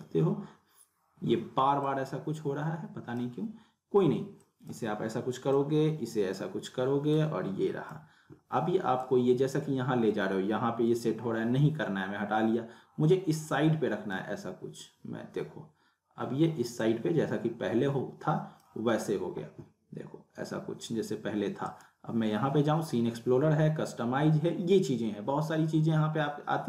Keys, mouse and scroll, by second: 1.8-3.4 drag, 16.8-17.7 drag, 21.6 right click.